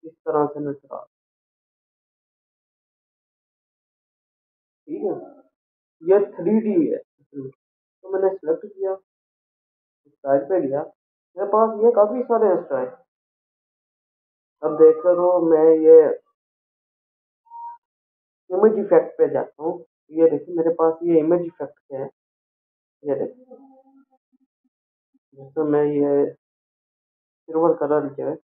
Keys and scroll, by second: 4.4 ctrl+0, 9.3 ctrl+a.